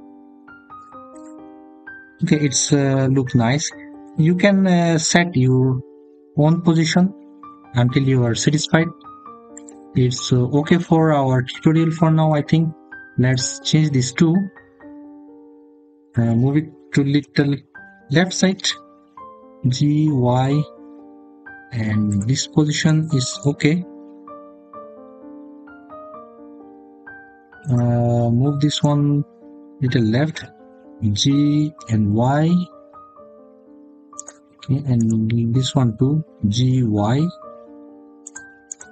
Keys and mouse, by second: 1.0 click, 9.4 click, 10.7 middle click, 13.1 click, 17.0 g, 18.3 y, 21.9 click, 22.5 click, 28.6 click, 30.1 g, 31.6 y, 34.0 click, 36.2 g, 36.5 y, 38.0 click, 38.5 click.